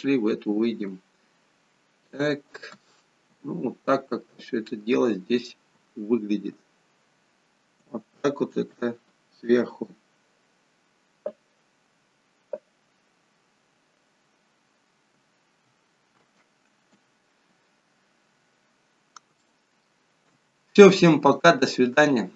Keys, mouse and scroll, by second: 17.4-18.0 scroll down 1, 18.5 scroll down 6, 18.6 middle click, 18.6 scroll up 8, 19.4 shift+middle click.